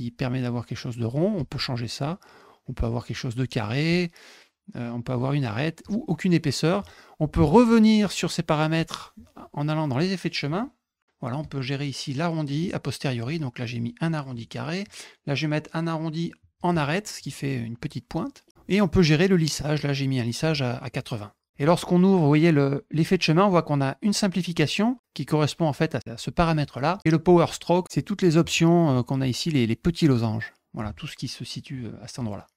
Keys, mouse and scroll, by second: 1.3-3.3 drag, 3.8-5.2 drag, 5.7 click, 8.7-9.8 drag, 11.3 click, 14.8 click, 28.2 click.